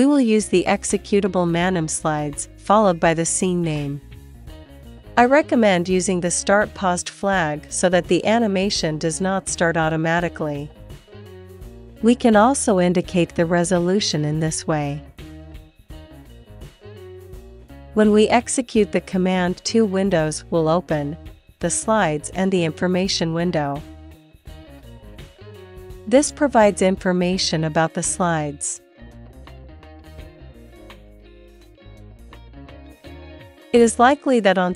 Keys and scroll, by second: 0.9 Right, 19.1 Return, 28.4 space, 32.4 Left, 32.8 Right, 33.1 Up, 33.6 Left, 33.9 Left, 34.1 Down.